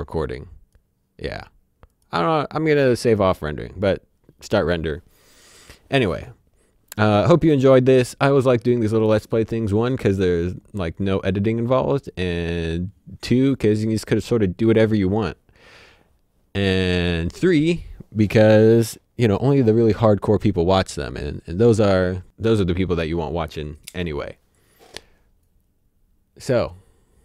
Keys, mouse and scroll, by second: 0.2 click.